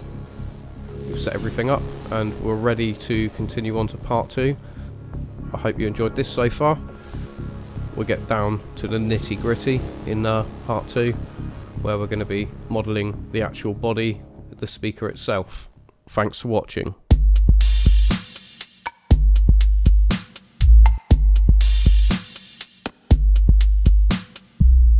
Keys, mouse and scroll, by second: 0.8 middle click, 1.4-1.9 scroll down 2, 1.9 middle click, 2.7 middle click, 8.2 middle click, 10.9 KP_1, 11.6-12.9 scroll up 2, 12.9 middle click, 13.5 middle click, 14.8 middle click.